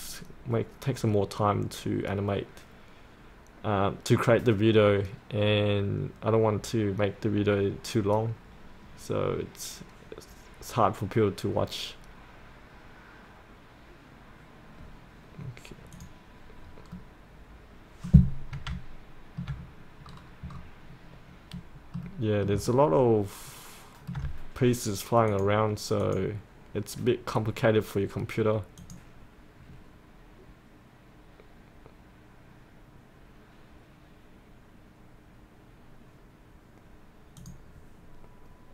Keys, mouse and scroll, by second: 17.0-18.2 middle drag, 18.8 alt+middle click, 19.7-20.1 scroll up 1, 20.1 scroll down 1, 20.9-21.6 scroll up 1, 21.6 middle click, 22.7 alt+middle click, 25.3-38.4 drag.